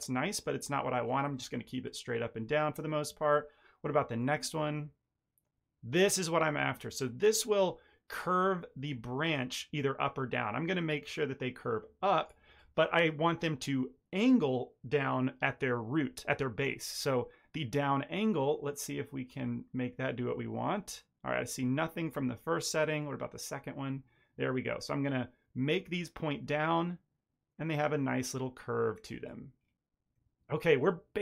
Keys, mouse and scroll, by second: 4.1 click, 18.3 click, 22.9 click, 29.5-31.0 scroll down 3, 30.1 middle click.